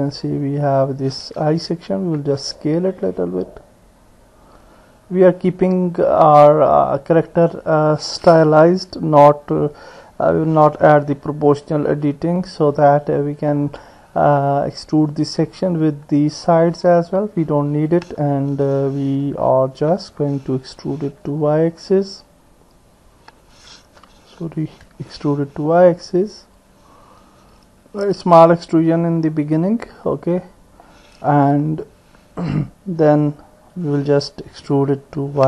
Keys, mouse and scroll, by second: 2.2 s, 6.8 middle click, 6.9 click, 20.2 e, 21.0 y, 24.0 Escape, 24.9 e, 29.4-30.8 drag, 33.3 click, 33.3 middle click, 35.2 e.